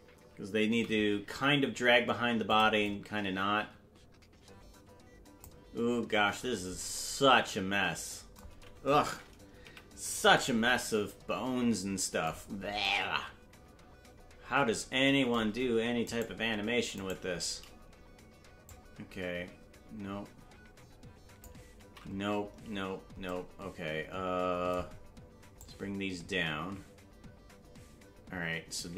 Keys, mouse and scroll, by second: 0.6 g, 2.8-5.4 drag, 9.6 KP_Decimal, 12.4-12.7 scroll down 3, 16.2-17.2 right drag, 18.6-21.4 drag, 22.3 ctrl+z, 25.5-28.9 drag.